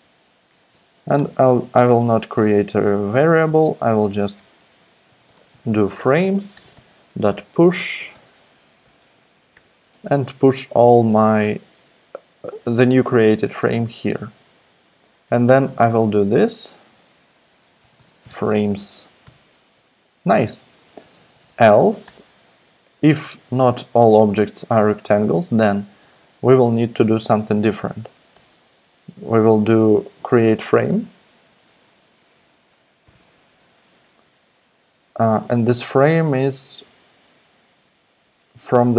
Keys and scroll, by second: 0.0 Right, 0.2 Right, 0.9 Left, 1.1 alt+BackSpace, 1.3 alt+BackSpace, 1.8 alt+BackSpace, 3.8-10.0 typing, 15.4 Return, 15.7 super+v, 17.3-19.5 typing, 19.1 Escape, 20.9-22.3 typing, 23.5 shift+{, 26.0 super+v, 28.3 Return, 30.4-31.4 typing, 31.9 Down, 32.2 Tab, 32.8-33.6 typing.